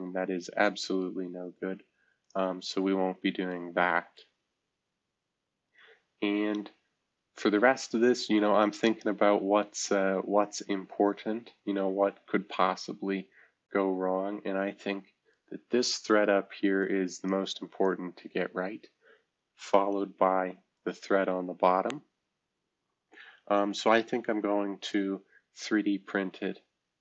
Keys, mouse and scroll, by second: 0.2-2.2 scroll down 1, 2.2 click, 3.0 scroll down 1, 4.2 right drag, 4.2 scroll down 1, 11.5-16.8 right drag, 16.8-19.3 drag, 20.0 shift+F2, 20.7-21.7 drag, 23.6-27.0 right drag.